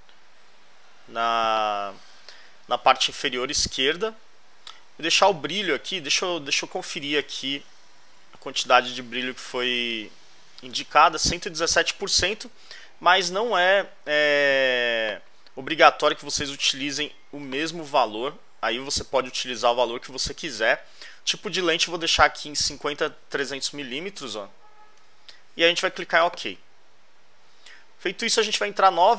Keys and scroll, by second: 6.4 alt+Left, 13.1 alt+Right, 23.5 alt+Left.